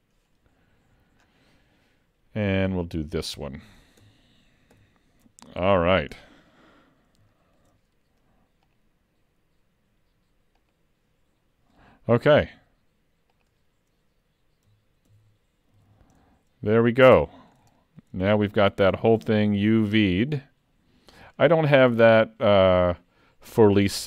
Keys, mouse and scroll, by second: 1.2-2.7 scroll down 7, 2.7 click, 4.8 shift+k, 5.9 alt+a, 6.1-7.2 scroll down 5, 7.4 shift+middle click, 8.7 click, 11.4-11.7 scroll up 2, 12.4 click, 15.2 ctrl+s, 15.9 alt+a, 16.2 middle click, 17.8 shift+middle click, 18.6 middle click, 20.2 middle click, 22.1-23.2 scroll up 2, 23.6 middle click.